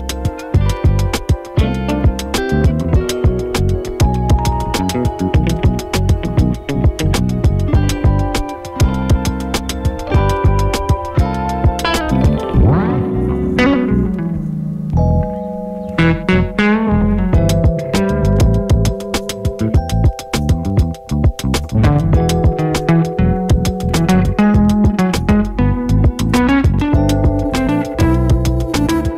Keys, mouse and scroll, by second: 0.8 space, 5.2 space, 6.0 click, 6.3-6.8 typing, 7.3 click, 8.0 ctrl+y, 8.7 Return, 9.6 click, 10.5 space, 16.3 space, 17.3 click, 17.9 ctrl+click, 18.3 u, 19.2-21.6 drag, 21.6 space, 22.7 click, 23.2 space, 26.9 space, 28.4 n, 28.7 space.